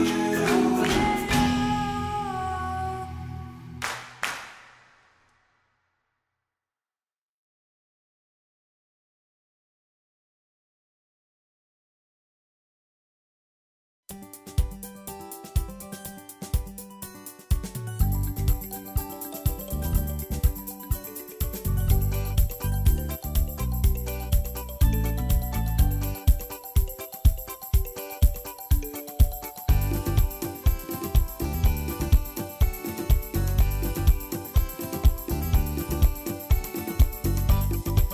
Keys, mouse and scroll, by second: 0.1 Tab, 0.2-0.7 middle drag, 0.7 KP_1, 1.4 Tab, 1.7 middle click, 2.3 3, 2.4 click, 3.0 g, 3.4 Tab, 4.1 KP_1, 4.6 i, 5.1 g, 5.7 shift+middle click, 5.9 Tab, 6.2 right click, 7.1 ctrl+2, 7.4 Tab, 7.7 1, 7.8 alt+z, 8.0 click, 8.3 s, 9.0 Tab, 9.3 alt+z, 9.7 o, 10.0 r, 11.4 Tab, 11.5 Delete, 11.9 shift+a, 12.7 s, 13.6 s, 14.1 s, 15.8 ctrl+2, 16.3 middle click, 16.5 g, 17.1 KP_1, 17.3 scroll up 2, 17.6-18.1 middle drag, 18.1 KP_1, 18.4 shift+middle click, 18.6 Tab, 18.9 middle click, 19.3 3, 19.7 KP_1, 20.0 shift+middle click, 20.5 ctrl+r, 21.8 1, 22.0 alt+z, 22.1 click, 22.5 s, 23.6 click, 24.0 g, 25.7 Tab, 26.1 Tab, 26.7 click, 27.3 o, 29.5 ctrl+a, 30.6 click, 31.1 alt+z, 31.6 right click, 31.9 Tab, 32.7 Tab, 33.3 alt+z, 34.5 click, 35.7 r, 37.0 s, 38.0 scroll up 2.